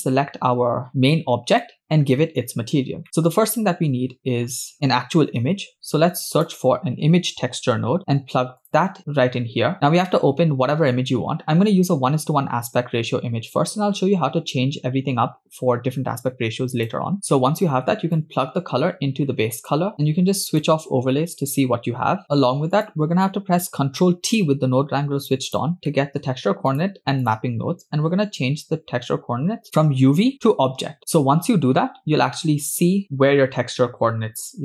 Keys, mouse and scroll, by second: 1.6 middle click, 2.7-3.2 scroll up 3, 3.2 middle click, 5.7 shift+a, 9.0 middle click, 9.0 click, 9.0 scroll up 2, 9.3 scroll down 1, 14.0 scroll up 1, 16.8 click, 17.1 middle click, 17.1 scroll down 2, 18.2-19.9 drag, 20.6 click, 22.3-22.7 scroll down 2, 22.8 click, 24.4 ctrl+t, 25.4 click, 25.8-26.2 middle drag, 26.7 click, 27.3 click.